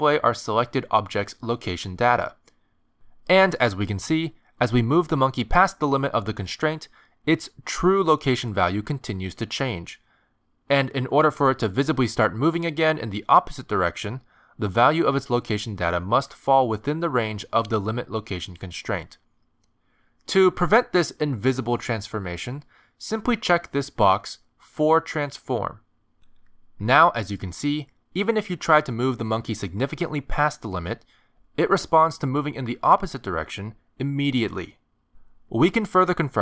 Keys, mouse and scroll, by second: 3.1 shift+middle click, 4.2 g, 23.8 click, 28.2 click, 30.0 click, 33.2 click.